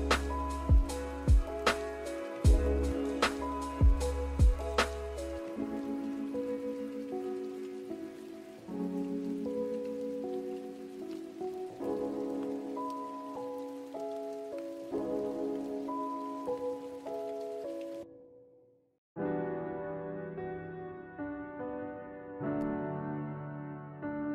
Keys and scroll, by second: 2.9 ctrl+z, 9.7 g.